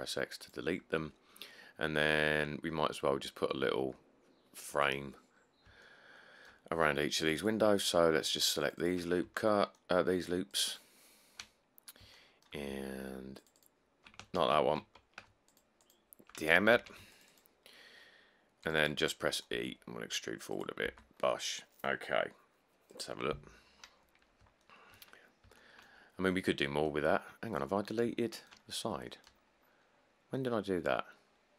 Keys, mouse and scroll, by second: 5.6 scroll, 5.8 scroll, 9.3 middle click, 9.4 middle click, 11.4 shift+middle click, 11.4 shift+middle click, 11.5 shift+middle click, 11.6 middle click, 12.1 scroll up 3, 14.6 ctrl+z, 16.9 ctrl+z, 19.7 e, 21.0 Tab, 21.3 middle click, 21.4-21.8 middle click, 21.7 middle click, 23.3 scroll, 23.9-25.2 middle click, 24.0-24.4 scroll, 25.3 middle click, 25.4 middle click, 28.0 middle click, 28.0 middle click, 28.1 middle click, 28.8 middle click, 28.9 middle click, 28.9 middle click, 29.0 middle click, 29.5 middle click, 29.6 middle click, 29.7 middle click, 29.8 scroll.